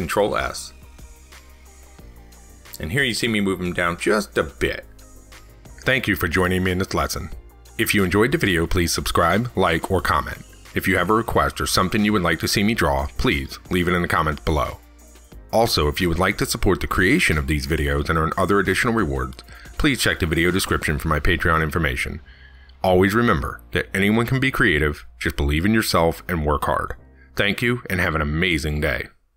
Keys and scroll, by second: 4.0 ctrl+s.